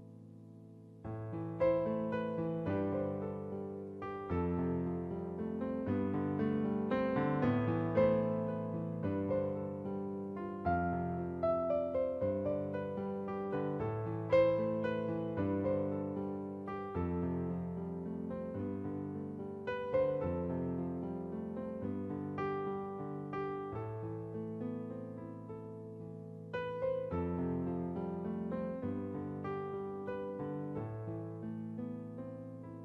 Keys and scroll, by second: 2.9-3.4 typing, 26.5 ctrl+t, 30.4 Return.